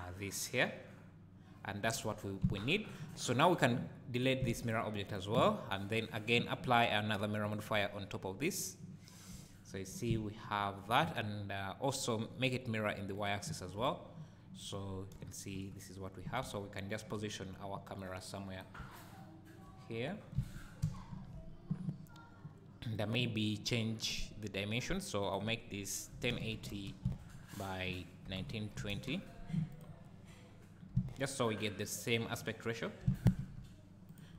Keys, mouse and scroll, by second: 3.4 click, 4.4 x, 5.1 click, 5.9-13.2 drag, 9.3 `, 13.7 `, 15.1 KP_0, 16.4 `, 17.7-18.0 scroll down 1, 18.8 `, 20.0-20.8 scroll up 1, 20.8 ctrl+alt+KP_0, 23.0 click, 24.1 click, 25.2-29.8 drag, 30.9 g, 31.9 click, 32.6-33.0 scroll up 1, 33.0 g, 34.2 click.